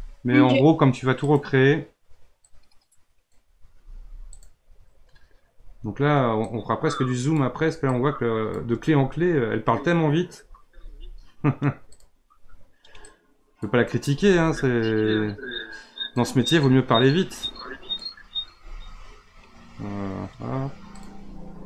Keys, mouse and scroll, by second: 2.5-3.7 drag, 3.7 r, 6.4 click, 7.9-10.7 drag, 10.7 r, 13.1-14.1 drag, 14.1 r, 17.4-18.6 drag, 18.6 r.